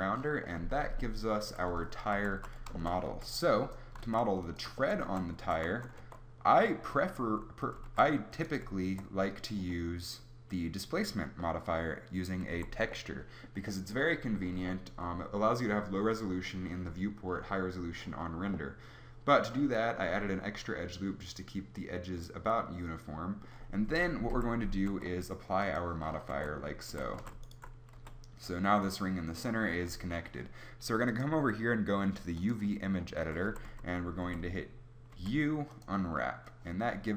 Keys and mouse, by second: 1.4-3.9 typing, 1.7 Tab, 5.1 z, 5.4 Tab, 6.0 Tab, 7.9 ctrl+r, 12.5 a, 24.3 KP_7, 24.9 Tab, 26.3 Tab, 26.9 a, 27.2 a, 28.0 g, 33.5 a, 33.7 a, 34.2 u, 35.2 u.